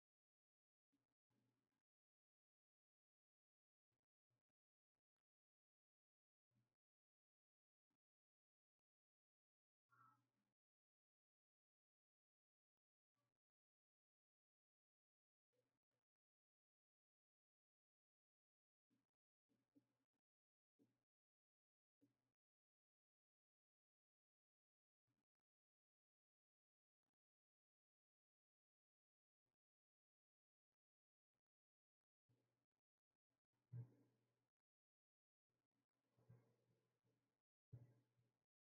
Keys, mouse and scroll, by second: 0.0-4.4 drag, 4.4 shift+right click, 11.3-18.5 drag, 24.1 right click, 32.2-37.0 drag.